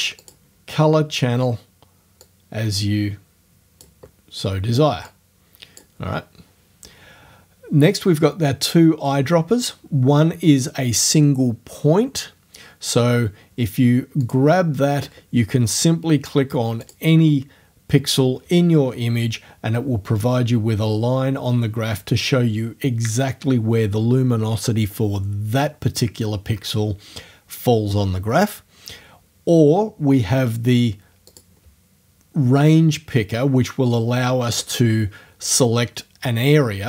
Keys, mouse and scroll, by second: 0.2 click, 2.3-4.0 drag, 5.1 click, 6.0 middle click, 14.3 click, 16.9 click, 31.3 click, 35.5-36.8 drag.